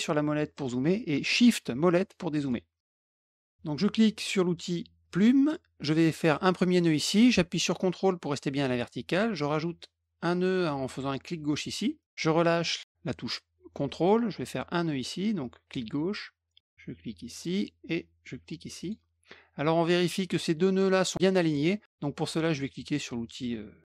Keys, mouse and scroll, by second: 0.5 middle click, 1.9 shift+middle click, 2.3 shift+middle click, 3.0 middle click, 5.0 click, 6.8 click, 11.4 click, 15.6 click, 17.3 click, 18.7 click, 21.3 click.